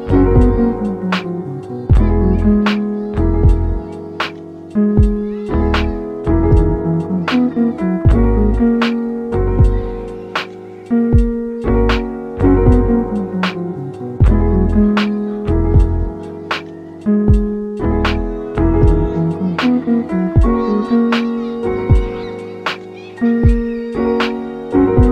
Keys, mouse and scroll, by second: 0.7 r, 1.6 g, 2.5 click, 2.8 r, 3.4 g, 4.2 r, 4.9 g, 7.0 g, 7.8 click, 8.1 g, 10.4 scroll down 2, 10.6-11.2 middle drag, 11.2 scroll down 2, 11.4-12.2 middle drag, 12.2 shift+a, 13.8 s, 17.3-18.4 middle drag, 18.4 s, 19.5 middle drag, 19.8 s, 20.9 s, 21.7-22.2 middle drag, 22.2 g, 23.1-24.0 middle drag, 24.0 ctrl+3.